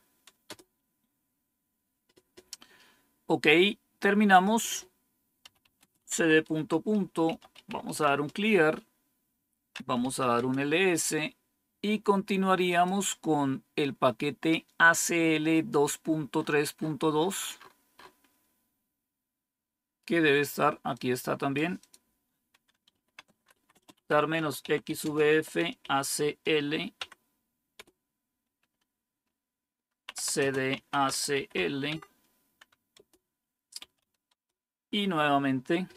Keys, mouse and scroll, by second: 0.0-0.3 typing, 0.4 Return, 4.2 click, 5.2-8.3 typing, 9.7-10.8 typing, 12.6 click, 16.3 scroll up 1, 17.6-18.9 scroll up 2, 18.9-20.9 scroll up 1, 20.9 click, 21.8 click, 22.6-26.3 typing, 26.9 Tab, 27.7 Return, 30.1-31.8 typing, 32.9-34.2 typing.